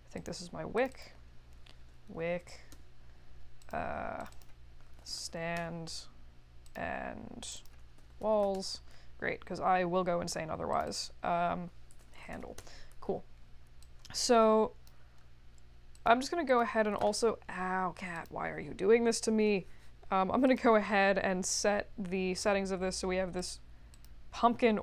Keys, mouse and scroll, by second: 0.1 click, 0.7 click, 0.9 click, 1.5-3.0 typing, 3.6 click, 4.2 click, 4.3 click, 4.6-5.9 typing, 6.6 click, 7.4 click, 7.6-8.9 typing, 10.7 click, 10.8 click, 11.7-12.9 typing, 13.8-14.8 drag, 15.9 click, 16.4 click, 18.1 click, 20.4 click, 23.3 click, 23.9 click.